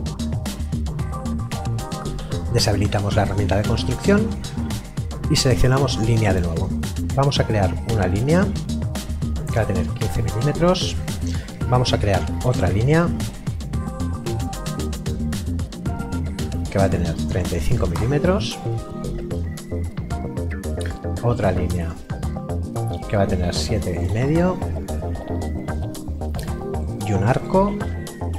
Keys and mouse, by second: 1.3 KP_9, 3.2 click, 9.6 KP_1, 9.7 KP_5, 9.8 ctrl+y, 10.1 click, 14.7 click, 18.0 Return, 21.8 click, 23.5 KP_7, 23.8 KP_Decimal, 24.0 KP_5, 25.7 Return, 26.7 click.